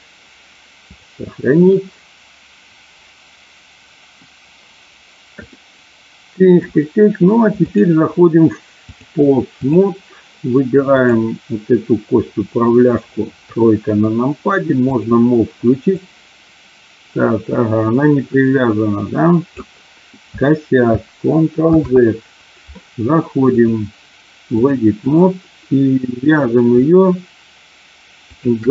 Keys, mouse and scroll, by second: 5.5-6.5 middle drag, 8.8 click, 10.8 click, 13.3 KP_3, 15.0 click, 15.8-19.6 drag, 21.6 ctrl+z, 23.5-24.7 drag, 28.2 shift+click.